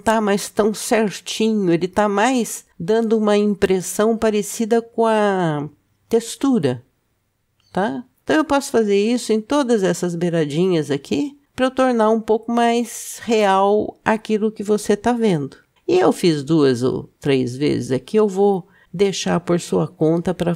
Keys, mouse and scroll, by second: 9.7 Tab, 10.7 click, 15.7 ctrl+b, 20.2 Tab.